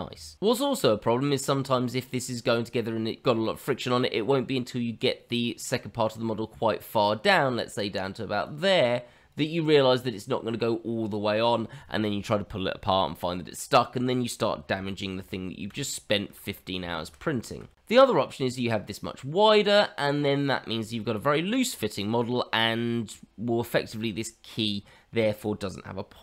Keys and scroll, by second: 15.3 ctrl+z, 15.8 ctrl+z, 17.1 ctrl+z.